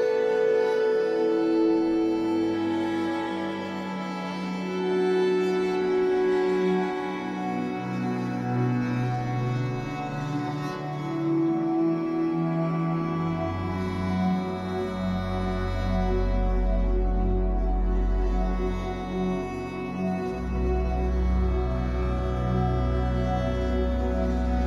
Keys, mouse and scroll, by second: 0.3 click, 0.4 middle click, 1.1 click, 1.3 middle click, 1.9 click, 2.3 middle click, 2.8-3.9 shift+drag, 3.9 f, 4.3-9.4 middle drag, 5.8 ctrl+z, 9.4-10.9 shift+drag, 10.9 f, 11.2-17.6 middle drag, 17.6-19.1 drag, 19.1-22.0 middle drag, 20.7 f, 22.0 click, 22.5 middle click, 23.1 shift+click, 24.1 f, 24.3-24.6 drag.